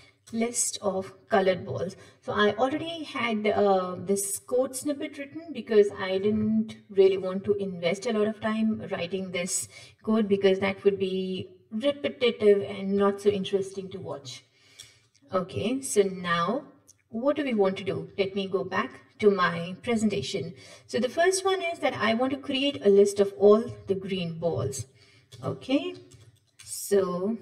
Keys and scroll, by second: 0.4 Return.